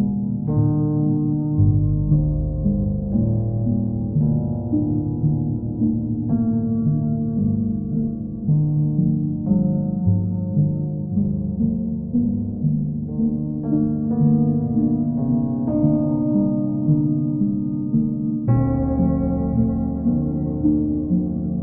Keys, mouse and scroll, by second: 0.7 click, 3.3 click, 4.3 alt+click, 8.0 click, 9.0 click, 10.9 click, 12.2 right click, 13.2 click, 18.8 click, 19.5 click, 19.8 shift+click, 20.6 alt+click.